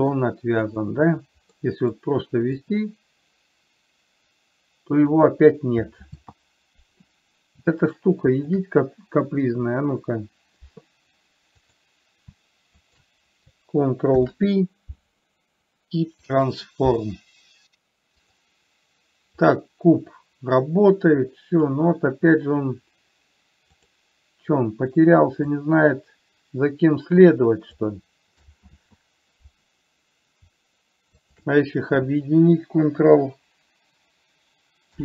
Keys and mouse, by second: 0.0 middle click, 1.0 click, 1.9 middle click, 3.0-5.4 drag, 6.4 ctrl+z, 8.7 click, 11.9 click, 13.2 shift+click, 14.4 ctrl+p, 19.9-22.0 drag, 24.2 click, 25.9-28.3 drag, 29.0 ctrl+z.